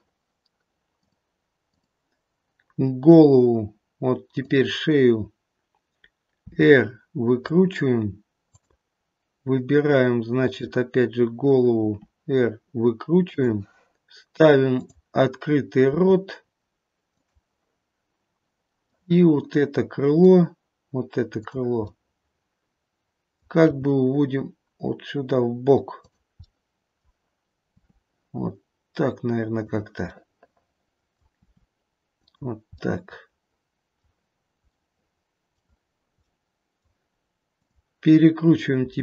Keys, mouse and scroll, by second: 0.1 click, 2.7-4.3 scroll up 1, 4.3 click, 4.3-5.1 scroll up 1, 5.2-5.6 scroll down 1, 6.4 r, 8.4 click, 10.3 click, 11.7 r, 14.7 click, 15.8 r, 18.9 middle click, 20.1 middle click, 21.3 click, 22.1 middle click, 23.6 g, 26.3 middle click, 27.8 r, 30.0 middle click, 31.3 r, 32.8 middle click, 34.7 middle click, 36.2 middle click, 37.6 click, 38.8 r.